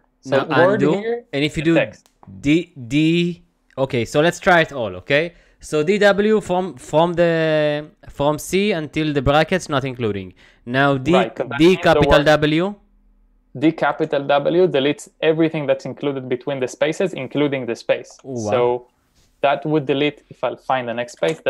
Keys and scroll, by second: 0.4 u, 11.2-14.4 typing, 18.2 u, 21.2 typing.